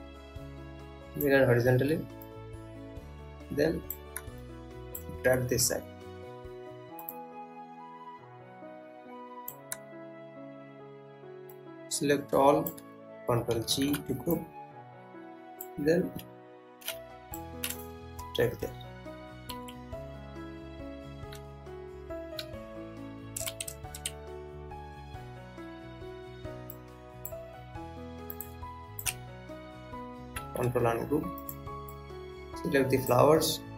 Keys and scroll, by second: 14.1 ctrl+g, 19.2 Up, 20.2 Left, 21.9 Up, 23.0 Right, 24.1 Left, 30.7 ctrl+u.